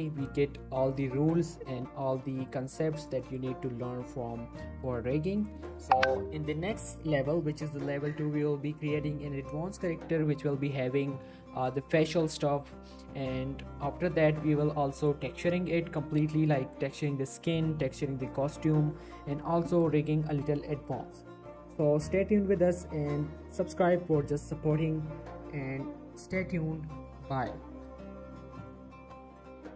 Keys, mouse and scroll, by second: 0.7 right click, 1.2 click, 1.4 g, 2.1 right click, 2.3 middle click, 3.2 middle click, 3.5 g, 4.8 right click, 5.4 click, 5.6 middle click, 5.9 g, 7.6 right click, 7.8 scroll down 1, 7.9 middle click.